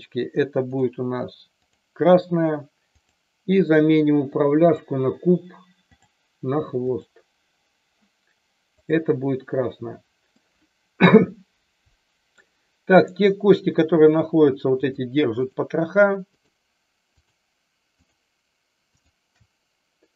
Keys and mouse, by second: 1.7 click, 3.0-3.4 drag, 4.6-6.0 drag, 6.9 click, 8.8 click, 10.4-12.4 middle drag, 12.9-13.4 drag, 15.4 shift+click, 17.3-17.7 shift+drag, 17.9 shift+click, 18.9 shift+click.